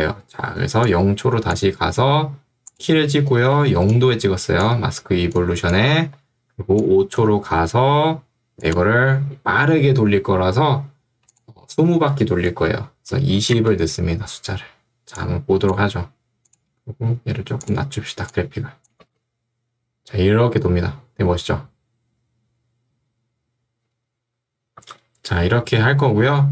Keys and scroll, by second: 3.7 ctrl+2, 6.1 Escape, 13.5 Return, 19.1 space, 24.9 space.